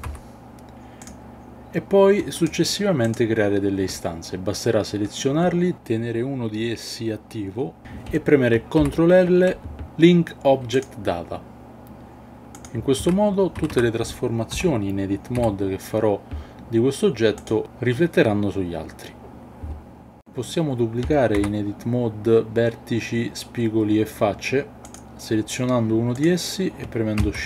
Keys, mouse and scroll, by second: 0.1 x, 2.4 shift+click, 8.8 ctrl+l, 13.0 Tab, 13.6 a, 13.7 a, 14.5 l, 15.4 g, 17.4 click, 21.4 Tab, 24.8 click, 27.2 shift+d.